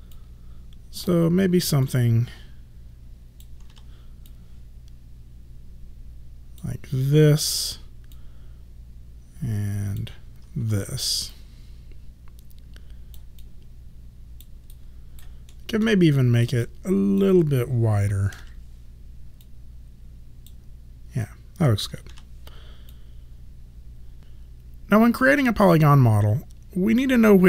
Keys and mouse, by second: 0.1 click, 3.7 w, 4.3 click, 7.5 r, 8.2 click, 10.6 w, 11.4 click, 13.4 alt+click, 14.7 alt+right click, 15.6 alt+middle click, 16.2 alt+right click, 16.7 alt+click, 18.4 r, 19.4 click, 22.1 w, 22.9 click.